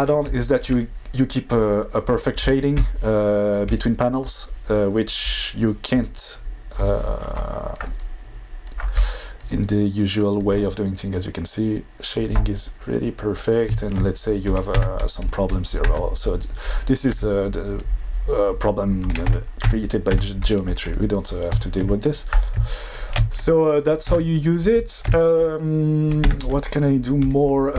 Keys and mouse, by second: 1.6-2.6 drag, 3.8-7.0 drag, 14.5 click, 14.7 Tab, 15.8 Tab, 17.1 Tab, 19.3 Tab, 19.6 Tab, 20.1 Tab, 24.1 Tab, 26.2 Tab.